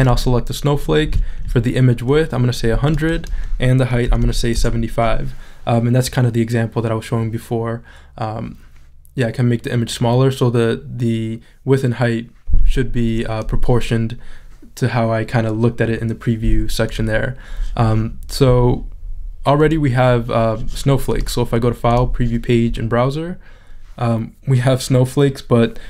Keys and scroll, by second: 4.1 7, 5.6 Return.